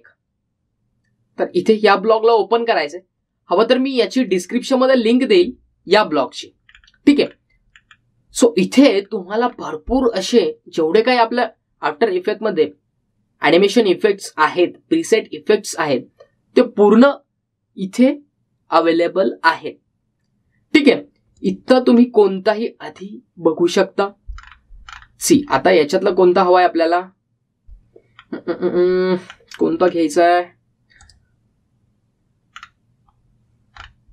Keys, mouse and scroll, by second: 5.3 click, 6.1-7.8 scroll up 1, 9.0-9.7 scroll down 1, 13.0 scroll up 1, 22.5 click, 23.1-25.0 scroll down 1, 25.5 scroll down 1, 26.7 scroll down 1, 28.2-28.9 scroll down 1, 32.1 click, 33.7 scroll down 1.